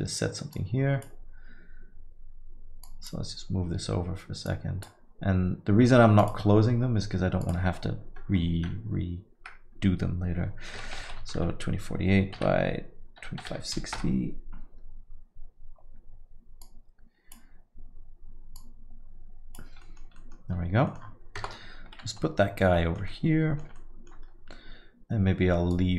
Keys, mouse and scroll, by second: 3.1 click, 4.5 click, 7.0 click, 7.4 click, 16.6 click, 18.6 click.